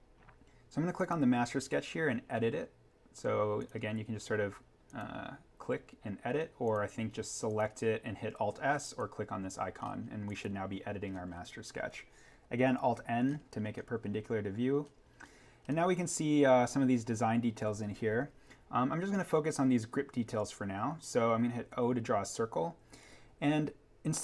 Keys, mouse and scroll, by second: 0.9 click, 3.5 click, 9.8-10.3 scroll up 1, 10.3 click, 10.7-11.3 scroll down 1, 12.6 alt+n, 13.2 scroll up 1, 20.7-21.7 scroll down 1, 21.7 o.